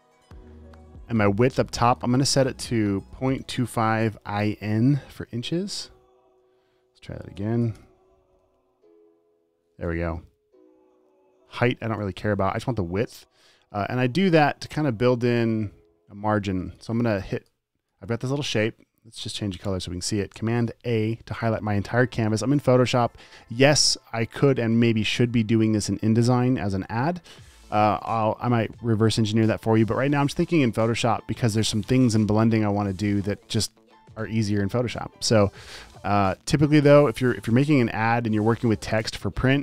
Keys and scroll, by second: 3.4-5.3 typing, 5.6 Tab, 6.8 shift+Tab, 7.4-9.2 typing, 19.9 super+BackSpace, 21.3 super+a, 37.9 super+z.